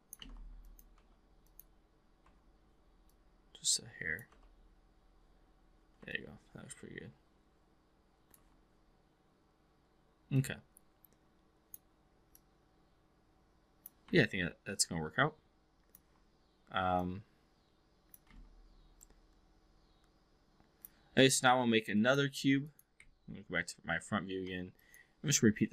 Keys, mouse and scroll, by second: 0.2 ctrl+z, 0.6 click, 0.9 3, 2.2 4, 3.0-4.2 drag, 4.3 w, 6.0-8.4 alt+drag, 7.3 alt+v, 10.2-11.8 drag, 12.3 click, 14.2-16.0 alt+drag, 16.8-18.2 drag, 18.3 x, 18.9-20.8 drag, 22.1 click, 23.0 v, 24.9 click.